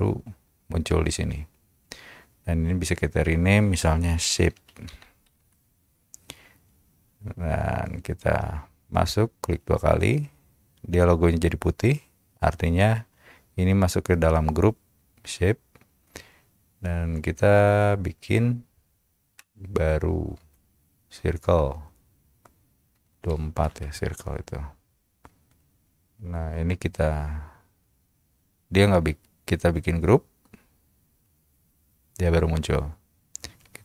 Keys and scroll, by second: 4.4-5.5 typing, 26.2 space.